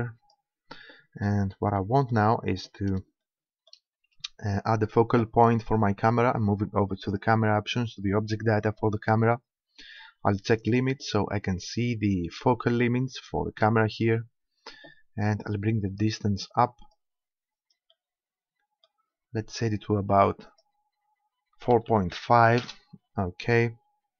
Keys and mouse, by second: 1.3-5.4 middle drag, 7.1-8.8 drag, 9.0 middle click, 11.0-13.0 drag, 13.2-15.5 middle drag, 15.5-17.2 drag, 17.6-19.6 middle drag, 20.5-22.2 drag, 22.3 middle click.